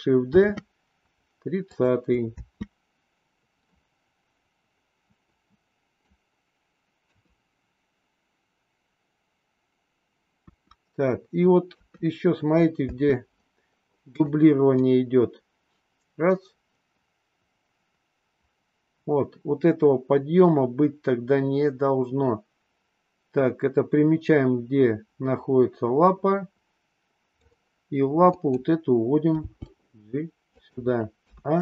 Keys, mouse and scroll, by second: 0.3 shift+d, 2.3 space, 3.7-6.1 middle drag, 7.1 KP_3, 10.5 KP_1, 11.7 KP_3, 12.9 space, 14.1 click, 14.7-27.5 drag, 28.3 click, 29.3 g, 31.2 a.